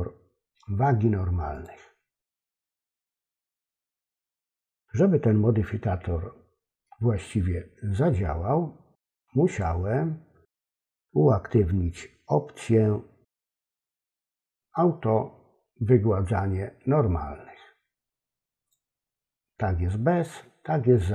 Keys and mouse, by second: 1.5 click, 9.4 click, 18.7 click.